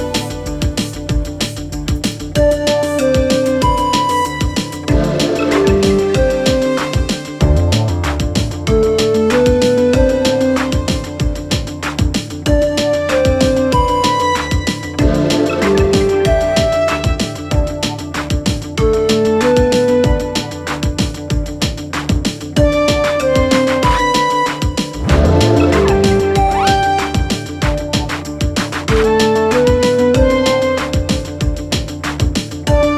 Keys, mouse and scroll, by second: 0.4 ctrl+z, 0.8-1.4 drag, 2.3 space, 2.5 click, 2.6 space, 3.2-3.5 drag, 8.3 space, 8.4 click, 8.6 space, 9.0 click, 9.9 drag, 11.9 space, 12.2 click, 13.8-14.1 click, 14.0 space, 14.4-15.5 drag, 16.5 space, 16.6 click, 16.7 space, 17.2-18.1 drag, 23.3 alt+scroll down 1, 24.5-25.1 alt+scroll up 1, 25.1 click, 25.8-26.7 alt+scroll up 1, 28.6 click, 31.5 right click.